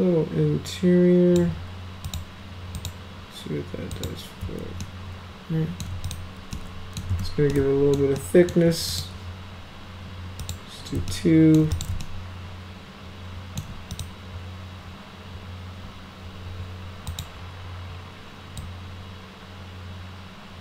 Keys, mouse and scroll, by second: 2.0 click, 2.7 click, 3.9 click, 4.8-5.8 alt+middle drag, 6.1 click, 6.5-7.0 alt+middle drag, 7.1 z, 7.5-7.9 alt+middle drag, 8.2 alt+middle click, 8.9 click, 10.4 click, 11.1-11.6 alt+middle drag, 11.7 click, 12.0-13.6 alt+middle drag, 13.9 click, 17.1 click, 18.6-20.6 drag.